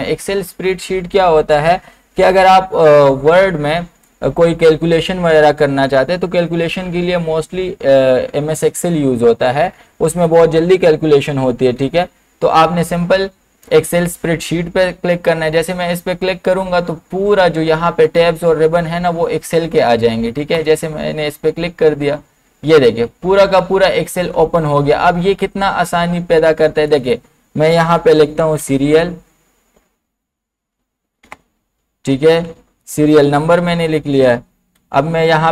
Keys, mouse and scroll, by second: 20.6 click, 20.6 click, 26.9 click, 28.6 s, 31.3-33.7 typing, 34.7 Down.